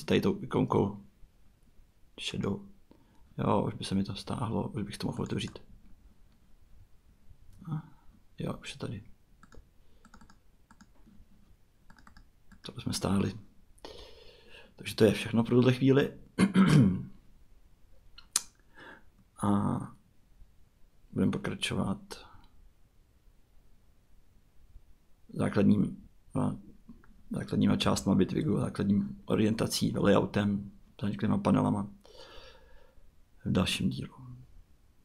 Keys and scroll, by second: 27.8 Tab.